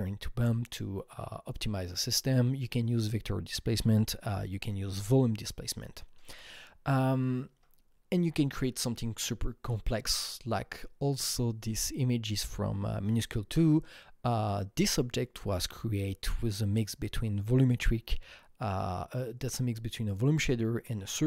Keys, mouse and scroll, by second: 7.5 Right.